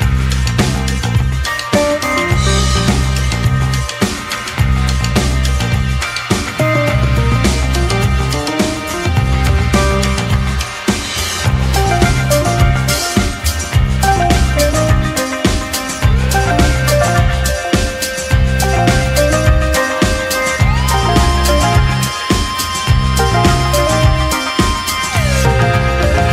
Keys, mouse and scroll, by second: 2.2-4.8 typing, 5.9-8.1 typing, 12.3-13.4 typing, 14.4 F1, 23.0 typing, 23.5 click.